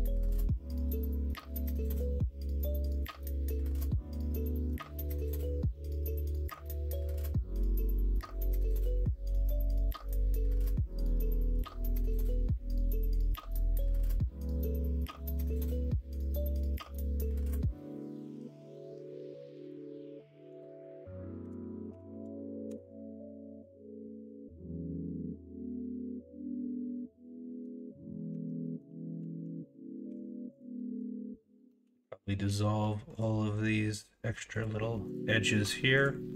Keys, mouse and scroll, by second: 0.0 middle click, 0.8 middle drag, 5.5 middle click, 6.5 middle click, 7.2 g, 10.1 middle click, 10.1 scroll up 1, 10.5 middle drag, 10.6 scroll down 1, 11.4 middle click, 27.0-27.6 middle drag, 28.3 Tab, 28.6 middle drag, 30.0 2, 30.7 middle click, 31.6 middle click.